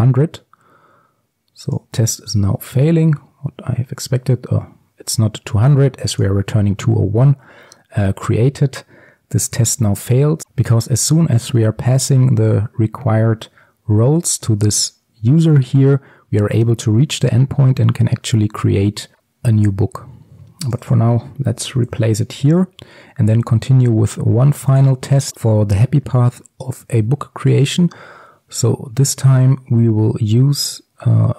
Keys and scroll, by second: 22.5 ctrl+s.